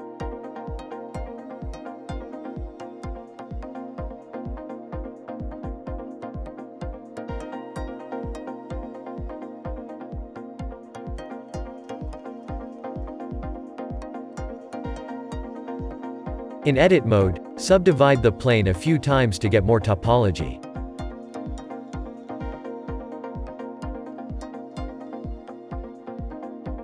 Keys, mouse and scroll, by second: 1.1-1.6 shift+middle drag, 1.6-2.0 scroll down 3, 2.3 KP_Decimal, 2.9-3.2 scroll down 3, 3.2-5.3 shift+middle drag, 5.3-6.2 drag, 8.7-9.8 middle drag, 9.8-10.2 scroll up 4, 10.2-11.1 shift+middle drag, 11.1 scroll down 3, 11.6 r, 14.8 Tab, 15.1 Tab, 17.4-19.8 right drag, 19.8-21.1 drag, 22.8 a, 24.2-25.9 right drag, 25.9-26.8 drag.